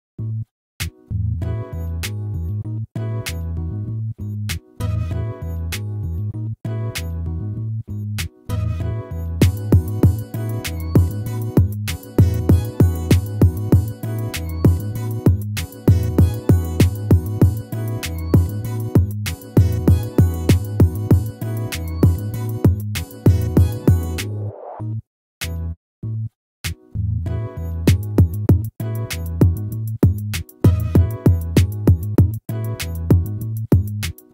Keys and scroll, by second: 0.0 ctrl+z, 2.1 ctrl+-, 21.8 ctrl+z, 32.9 ctrl+z.